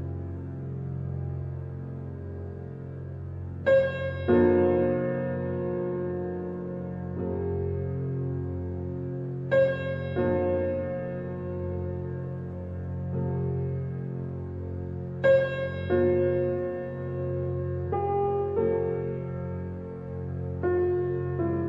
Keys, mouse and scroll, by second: 0.5 shift+middle click, 1.0-2.2 scroll up 1, 2.2-3.3 middle drag, 3.3-3.6 scroll down 1, 3.6-4.7 middle drag, 4.7 x, 7.1-8.1 drag, 8.7 alt+click, 9.3-12.3 middle drag, 13.2-15.3 middle drag, 15.3 alt+h, 16.7 Escape, 19.0 shift+h, 20.2 ctrl+z, 21.4 alt+h.